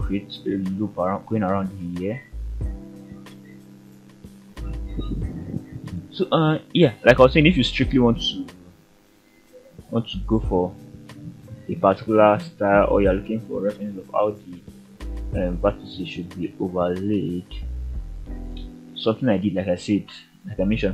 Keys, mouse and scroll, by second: 0.3 scroll up 1, 0.8 shift+middle click, 1.2-1.5 shift+scroll up 2, 2.2 e, 5.4 click, 6.5-7.2 shift+middle drag, 8.6-9.1 shift+middle drag, 9.8 e, 10.9 click, 11.4 r, 14.0 click, 15.6 click, 16.2 g, 18.5 drag.